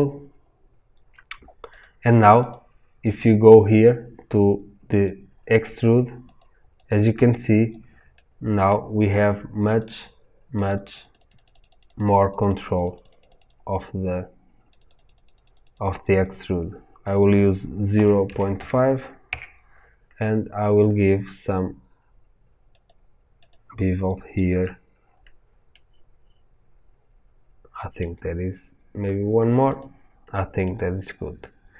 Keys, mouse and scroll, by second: 1.8 click, 6.3-9.8 drag, 10.6-25.6 drag, 19.3 KP_Enter, 25.6-29.7 middle drag, 29.7 click, 30.6-31.7 middle drag.